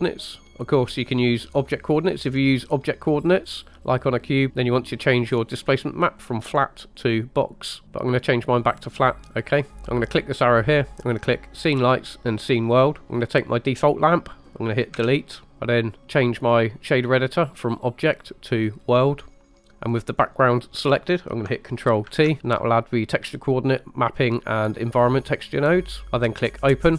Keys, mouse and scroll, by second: 2.0 click, 2.4 click, 6.2-7.2 drag, 8.1-9.1 drag, 9.2 scroll down 3, 10.1-12.8 drag, 13.0 click, 14.9 Delete, 17.6-19.0 drag, 19.4 middle click, 20.0 click, 22.1 ctrl+t, 25.8 click, 26.0 g, 26.6 click.